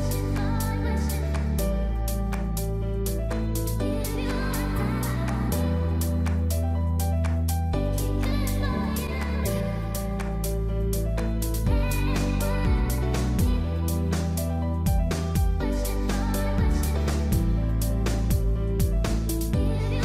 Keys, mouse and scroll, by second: 1.1 middle click, 1.6 Tab, 1.8 right click, 2.1 middle click, 3.1 Tab, 3.3-3.8 scroll up 2, 3.5 middle click, 4.7 click, 4.9 middle click, 5.4 middle click, 6.7 click, 6.9 middle click, 7.5-7.9 scroll down 2, 7.6 middle click, 7.9-8.2 scroll up 2, 8.2 shift+middle click, 8.5 middle click, 9.6 middle click, 10.2 click, 10.8 shift+click, 11.3 click, 12.5 middle click, 13.0 shift+middle click, 13.3-13.9 scroll up 3, 13.5 middle click, 14.6 Tab, 14.7 scroll down 3, 14.8 middle click, 15.7 Tab, 15.8 middle click, 19.5 Tab, 19.6 middle click.